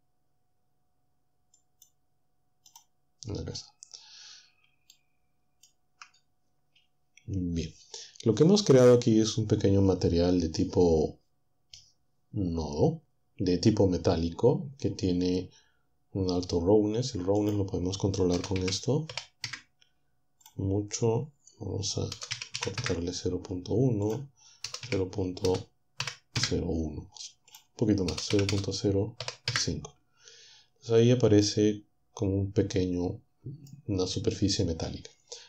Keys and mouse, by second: 1.8 click, 2.8 click, 5.0 shift+click, 17.4 click, 18.6-20.5 typing, 19.4 Return, 20.4 click, 22.3 typing, 22.8 Return, 24.6-26.0 typing, 26.4 Return, 27.5 click, 28.1-29.2 typing, 29.6 Return.